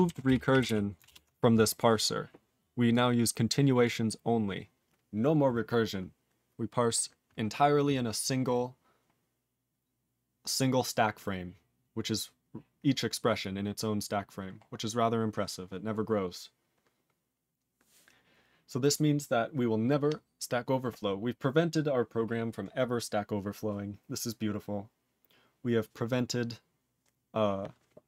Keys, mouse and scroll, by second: 1.0 ctrl+Return, 2.0 scroll up 4, 2.9 click, 3.4 click, 3.8 click, 3.9 click, 4.1-5.0 scroll up 6, 5.7-6.3 scroll up 6, 6.8 scroll up 3, 7.8-9.6 scroll up 13, 9.8-10.4 scroll up 4, 11.2-11.6 scroll down 15, 14.5-15.2 scroll down 4, 15.2-17.5 scroll up 10, 17.5-28.0 scroll up 1.